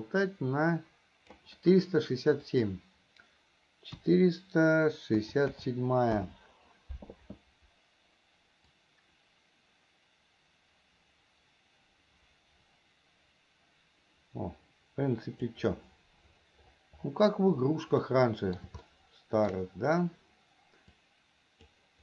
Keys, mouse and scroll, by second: 2.7-6.5 drag, 9.1-15.9 drag, 18.4 middle click, 19.2 shift+middle click, 21.3 click.